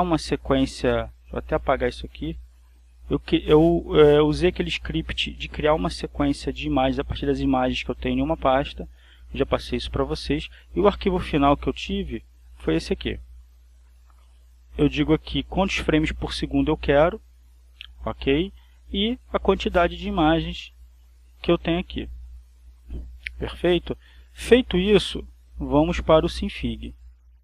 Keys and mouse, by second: 1.1 click, 2.4 shift+Delete, 2.7 shift+Return, 11.6 click, 12.6 click, 14.1 click, 24.2 click, 26.9 click.